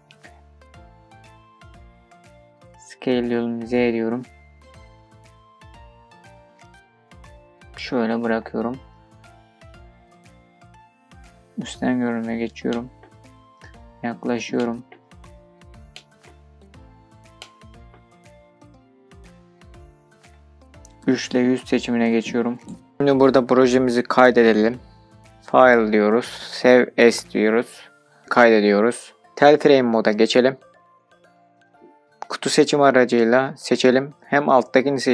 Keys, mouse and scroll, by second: 0.1 shift+middle click, 0.6-1.2 scroll up 2, 1.2 scroll up 1, 1.4 shift+middle click, 2.7 s, 3.1 z, 8.4-10.1 drag, 11.0 middle click, 11.0 scroll down 7, 12.3-12.7 scroll up 2, 13.6 shift+middle click, 14.2-15.2 scroll up 3, 15.2 scroll up 2, 15.5 shift+middle click, 16.1-16.6 scroll up 3, 16.8 shift+middle click, 17.3-17.7 scroll up 1, 18.1 scroll up 2, 18.3 shift+middle click, 19.1 scroll up 2, 19.8-20.3 shift+scroll down 3, 20.6 scroll down 2, 21.9 3, 25.3-28.2 drag, 30.1 click, 30.7 click, 33.4 click, 34.8 i.